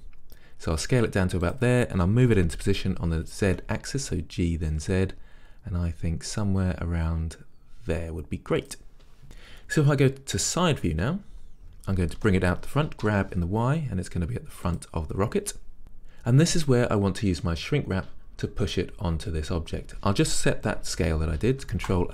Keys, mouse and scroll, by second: 1.6 click, 2.5 g, 6.6-8.7 middle drag, 8.8 click, 12.3 g, 14.8 click.